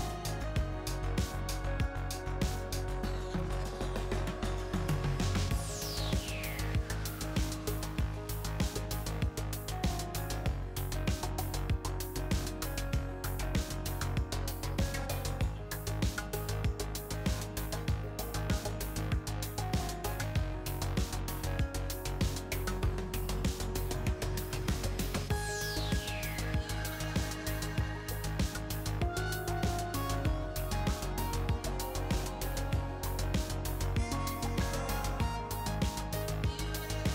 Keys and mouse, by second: 1.1-4.8 middle drag, 5.8 click, 6.1 middle click, 9.0 g, 11.3-13.7 drag, 11.9 a, 12.0 a, 13.7 Tab, 14.4-17.0 drag, 17.0 Tab, 18.8 ctrl+r, 19.3-21.2 middle drag, 21.5 ctrl+r, 22.2-23.4 drag, 25.9-27.8 drag, 27.1 g, 28.5 click, 31.2 KP_3, 32.0 a, 32.1 a, 33.7-34.9 drag, 36.3 KP_0.